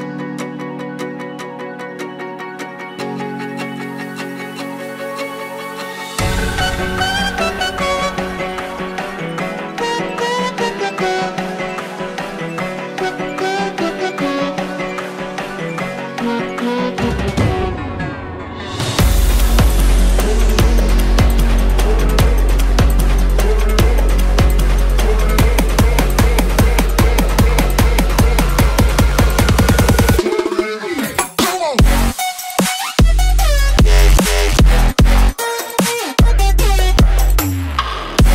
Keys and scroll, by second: 6.8-8.1 typing, 22.8 ctrl+u, 24.2 ctrl+g, 32.5-33.4 typing, 33.8 Return.